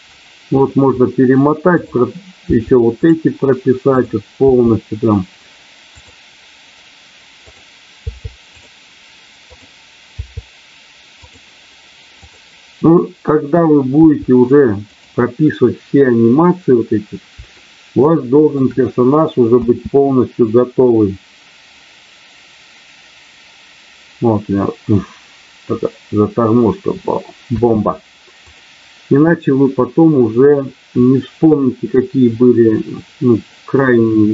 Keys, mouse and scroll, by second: 1.7 click, 3.9 click, 4.3 i, 7.4 click, 9.5 click, 10.0 i, 12.2 click, 17.5 shift+middle click, 19.4 space, 27.4 space, 28.4 click.